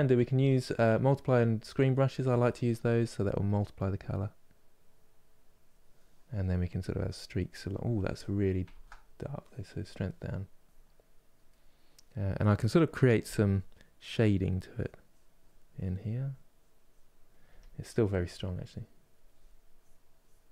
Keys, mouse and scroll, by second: 2.1-8.4 drag, 8.4 ctrl+z, 9.1-11.2 drag, 11.2-12.9 middle drag, 12.9 f, 13.9-17.2 drag, 17.2 f, 18.4-20.5 drag.